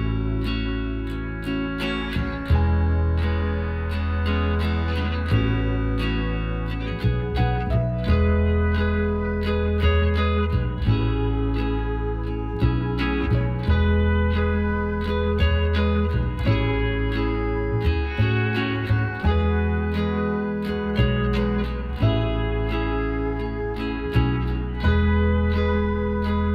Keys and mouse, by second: 0.8 ctrl+z, 2.0-3.8 drag, 4.4-5.5 middle drag, 5.5 KP_Divide, 6.3 z, 9.4 x, 10.6-13.2 middle drag, 13.2-14.9 drag, 14.9-16.4 middle drag, 16.4-19.3 right drag, 18.7 f, 21.4 f, 24.0 f, 25.5-26.5 drag, 26.1-26.5 right drag.